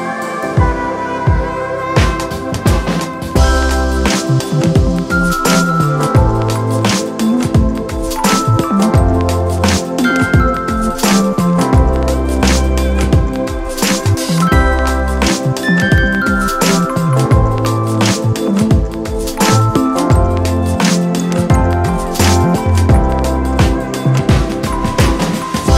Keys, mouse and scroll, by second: 15.0 alt+shift+click, 19.6 alt+shift+click.